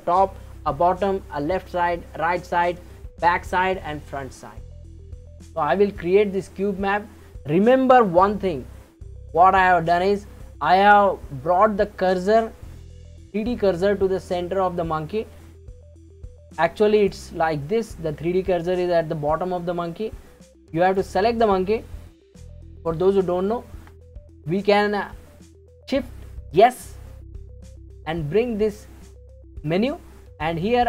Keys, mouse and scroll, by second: 16.0 shift+s, 17.5-20.5 middle drag, 20.8 click, 21.8-23.7 middle drag, 23.7 shift+s.